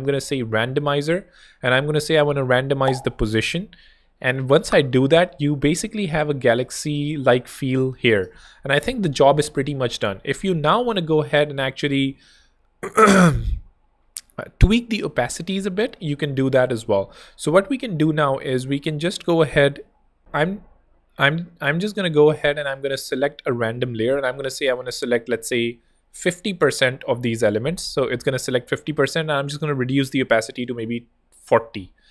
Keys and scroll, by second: 0.0-0.5 typing, 5.3 Escape, 6.9 super+space, 20.2 ctrl+super+r, 21.5 ctrl+super+r, 24.2-25.1 typing, 26.3 shift+Left, 26.4-27.4 typing, 31.3 4.